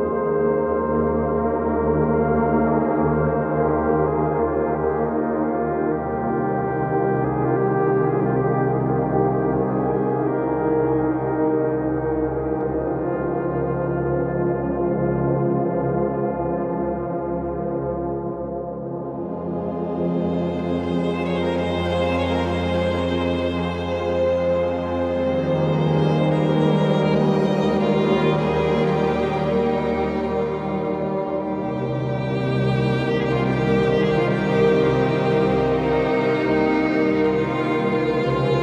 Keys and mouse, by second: 0.9 click, 2.7 click, 4.9 click, 6.2 click, 7.9 click, 9.9 click, 11.3 click, 11.9 click, 12.9 click, 13.6 click, 14.2 click, 15.6 click, 16.7 click, 17.3 click, 18.6 click, 19.2 click, 20.7 click, 21.2 click, 21.9 click, 22.4 click, 25.1 click, 25.7 click, 26.2 click, 27.2 click, 27.9 click, 29.4 click, 30.5 click, 31.3 click, 32.7 click, 34.1 click, 35.1 click.